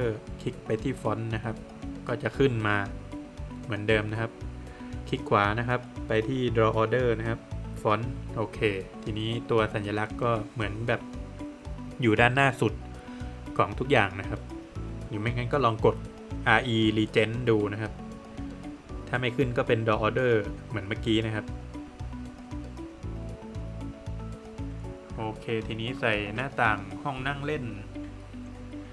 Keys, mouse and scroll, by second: 0.4 Escape, 0.9 scroll down 2, 1.1 middle click, 1.5 Escape, 1.6 scroll up 1, 2.0 click, 4.3 double click, 4.6 right click, 6.9 click, 8.3 Escape, 8.6 scroll down 1, 8.8 middle click, 9.2 scroll up 1, 10.4 space, 11.3 Escape, 11.4 scroll down 1, 11.7 middle click, 12.5 scroll down 1, 12.6 middle click, 16.9 middle click, 18.7-19.0 scroll up 1, 20.0-20.5 scroll down 2, 20.1 middle click, 21.5 middle click, 22.9 middle click, 23.9 click, 28.2 click.